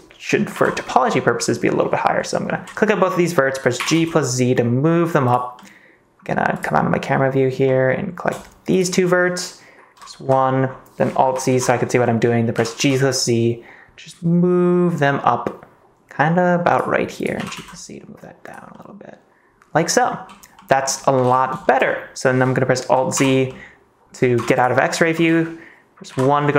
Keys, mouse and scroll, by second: 0.5 KP_1, 3.7 g, 3.9 z, 5.2 click, 5.5 middle click, 7.6 middle click, 9.9 KP_1, 10.2 KP_1, 11.4 alt+z, 12.5 g, 12.7 z, 16.6 click, 17.3 g, 17.5 z, 18.4 click, 18.7-20.2 middle drag, 20.6 click, 21.2 ctrl+s, 23.1 alt+z, 23.4 middle click, 24.4 ctrl+s, 24.5 click, 24.8 middle click, 25.1 ctrl+s, 26.0 KP_1.